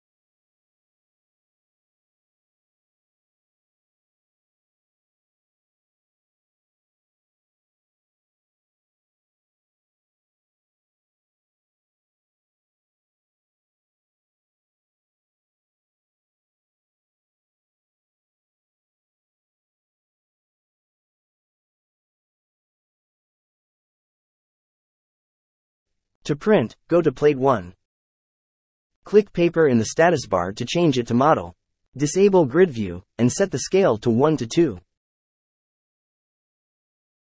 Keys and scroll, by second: 0.5 r, 0.8 o, 0.8 space, 3.7 KP_3, 3.8 KP_0, 4.1 Return, 5.8 l, 5.9 space, 6.6 5, 6.7 Return, 7.5 Escape, 8.1-9.0 typing, 10.0 Escape, 11.7 m, 12.0 Escape, 12.8 c, 13.0 space, 14.1 Escape, 14.6-15.5 typing, 17.5 l, 17.6 space, 18.7 Escape, 20.0 m, 20.1 space.